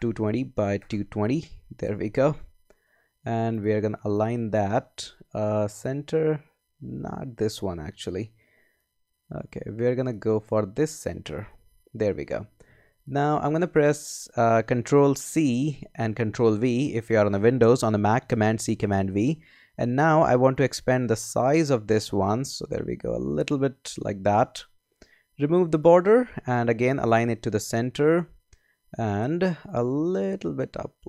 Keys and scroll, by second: 0.0-1.5 typing, 0.4 Tab, 2.0 Return, 15.5 super+c, 16.3 super+v.